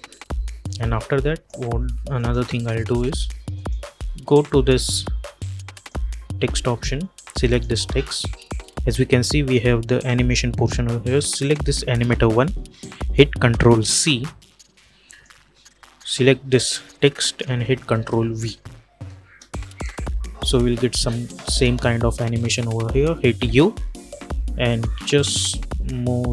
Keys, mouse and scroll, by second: 11.3 click, 13.7 ctrl+c, 14.9 click, 18.1 ctrl+v, 19.1 space, 23.2 u, 24.7-26.3 drag.